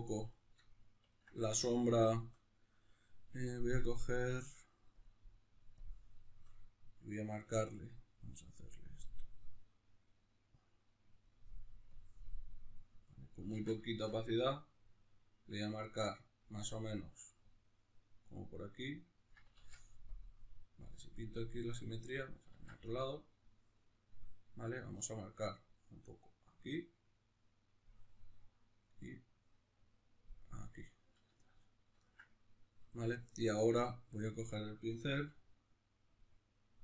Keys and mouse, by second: 9.3-13.1 drag, 13.1-19.3 middle drag, 13.6 z, 19.3 click, 19.6 ctrl+z, 21.2 click, 21.4-27.9 middle drag, 22.5 ctrl+z, 27.9 click, 28.1-30.3 middle drag, 30.3 click, 30.7-36.2 middle drag, 35.1 f, 36.2 click.